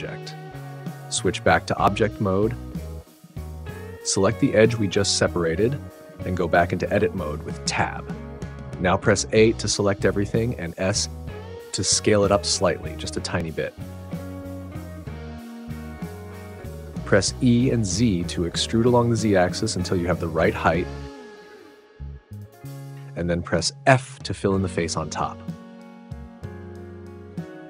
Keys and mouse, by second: 1.0 Tab, 7.0 Tab, 8.5 a, 10.8 s, 13.0 click, 17.5 e, 18.5 z, 21.4 click, 21.9-23.4 middle drag, 23.4 f.